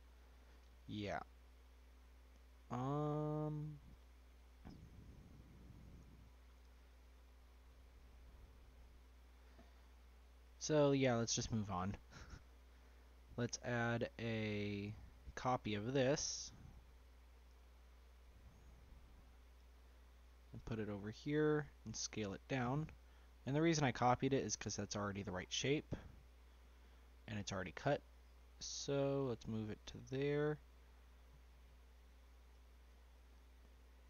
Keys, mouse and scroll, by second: 1.3-2.0 scroll down 1, 2.0-2.8 scroll down 1, 9.1-9.4 scroll down 1, 9.4-11.5 middle drag, 11.5-11.9 scroll down 1, 11.9-13.0 shift+middle drag, 13.0 click, 15.0 click, 16.1 ctrl+c, 17.5 ctrl+v, 18.6 click, 19.5 g, 22.1 s, 24.4 scroll up 1, 24.5 middle click, 25.1-25.8 scroll up 3, 25.8-27.0 shift+middle drag, 27.0 scroll up 1, 27.1-29.5 middle drag, 29.5 g, 32.5 g.